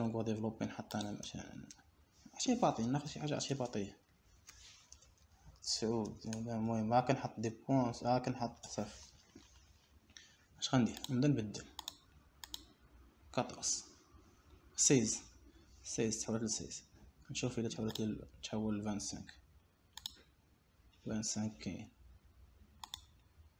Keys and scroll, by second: 1.9 Escape, 4.2 shift+2, 6.7 6, 7.6 Return, 8.3 9, 8.7 Return, 8.9 8, 9.3 Return, 9.7 6, 10.1 Return, 10.5 5, 11.2 Return.